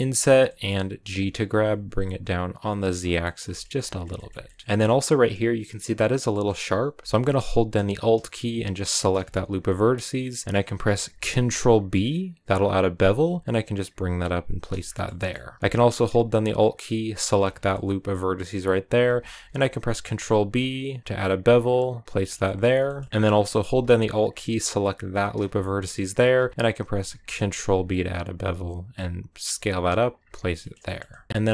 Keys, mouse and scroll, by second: 0.4 middle click, 0.8 g, 2.8-3.2 scroll down 4, 3.2-4.8 shift+middle drag, 4.8 scroll up 2, 5.9 scroll down 2, 6.1-8.6 middle drag, 8.6 alt+right click, 9.6 scroll up 2, 10.0-11.1 middle drag, 11.1 ctrl+b, 14.5 scroll down 1, 14.6-17.3 shift+middle drag, 17.3 scroll down 2, 17.5-19.2 middle drag, 19.2 ctrl+b, 22.0-23.1 shift+middle drag, 23.1 scroll up 2, 25.1 alt+right click, 25.4-26.7 middle drag, 26.7 ctrl+b, 30.1 scroll down 3, 30.5-31.5 shift+middle drag.